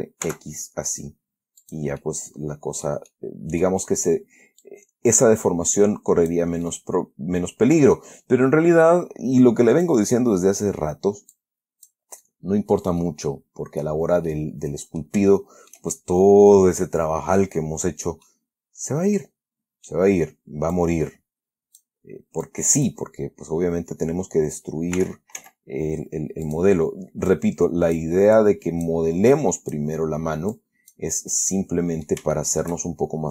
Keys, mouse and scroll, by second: 0.0 r, 0.6 x, 1.9 click, 2.3-4.1 middle drag, 4.9-6.8 drag, 7.0-8.4 middle drag, 10.2 click, 11.6 click, 13.3-14.3 middle drag, 15.6-17.9 shift+middle drag, 18.6-20.4 middle drag, 21.1-22.3 drag, 22.8 click, 25.3 r, 25.7 z, 26.8 click, 27.6 click, 28.7 click, 29.7 click, 30.8 click, 31.7 middle click, 32.7 shift+middle click.